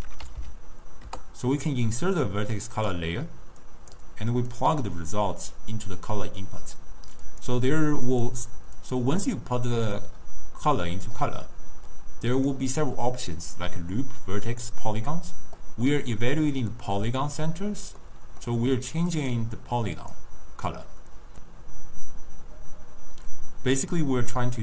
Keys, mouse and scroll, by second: 3.7-4.7 drag, 7.3-8.3 drag, 8.9 drag, 10.0 drag, 12.4-15.5 drag, 16.0-19.3 middle drag, 19.3-22.3 drag, 22.7-24.6 middle drag.